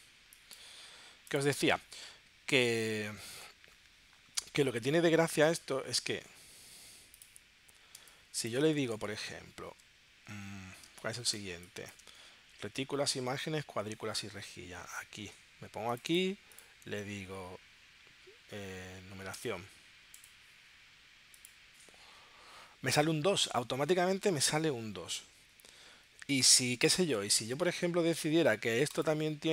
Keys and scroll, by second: 8.0 space, 10.9 space, 13.7 super+Tab.